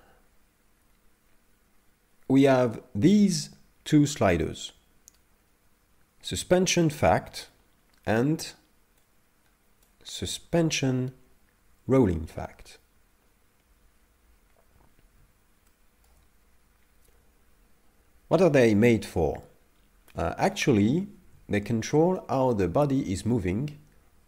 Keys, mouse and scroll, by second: 9.0 click, 15.7 shift+middle click, 21.6 shift+middle click, 22.2 middle click.